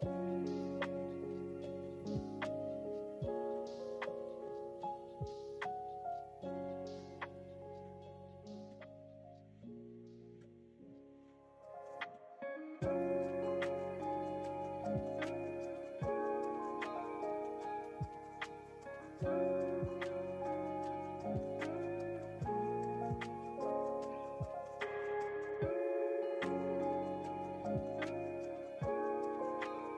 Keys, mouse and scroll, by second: 0.8 alt+KP_3, 1.4 KP_3, 3.3-4.3 drag, 5.8 click, 7.4 click, 8.3 click, 9.9 g, 18.2 ctrl+z, 18.2 ctrl+x, 19.8 click, 21.8 click, 22.8 click, 23.8 click, 26.2 click.